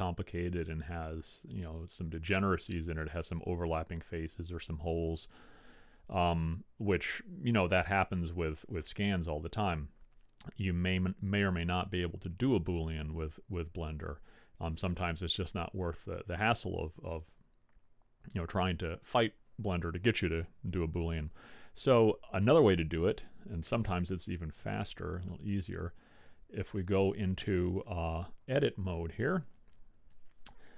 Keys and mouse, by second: 17.0-20.8 middle drag, 26.5 Tab.